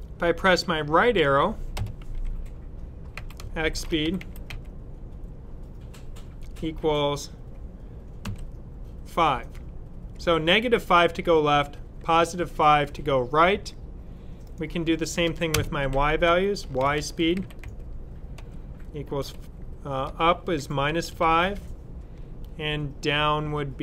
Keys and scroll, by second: 3.0-4.4 typing, 6.3 typing, 8.1 typing, 11.7 ., 16.1-19.1 typing, 20.5-21.3 typing.